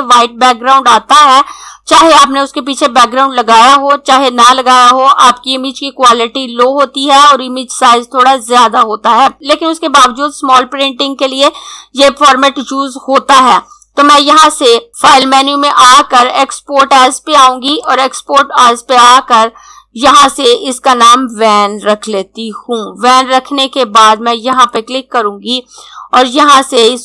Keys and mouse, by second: 15.1 click, 19.9 click, 21.4-22.6 typing, 24.4 click.